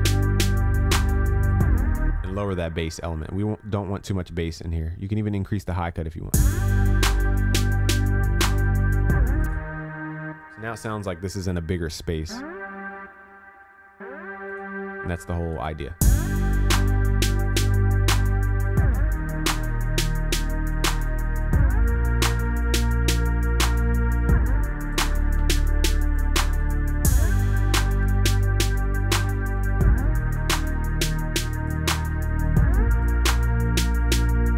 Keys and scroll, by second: 28.7 ctrl+s.